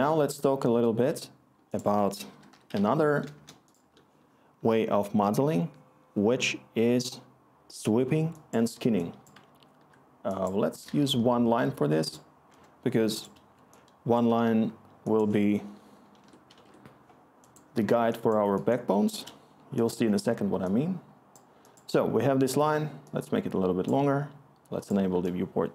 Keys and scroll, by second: 0.0-0.8 typing, 1.9 Tab, 2.0-3.5 typing, 12.4 Return, 14.6 scroll, 15.8 typing, 16.1 Tab.